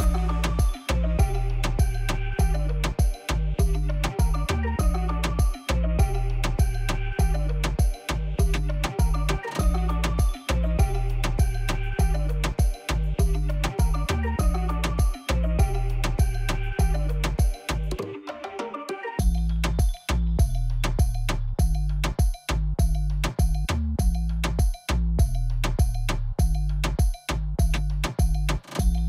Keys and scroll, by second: 0.0-0.3 typing, 1.4 shift+z, 2.0 alt+a, 3.5-5.5 typing, 6.7-8.1 typing, 8.9 alt+a, 10.1-11.9 typing, 12.6 alt+a, 14.3 shift+d, 14.4 shift+z, 15.3 alt+a, 16.7 Tab, 17.0 s, 17.7 alt+a, 25.3 ctrl+alt+0.